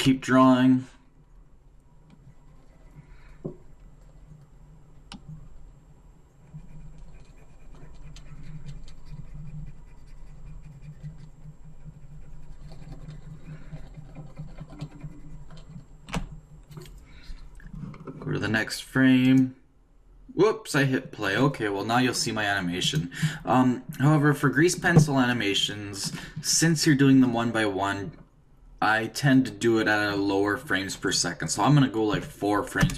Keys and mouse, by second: 0.0-1.7 d, 1.7-3.7 drag, 15.9 d, 19.2 click, 19.2 d, 24.6-27.3 middle drag.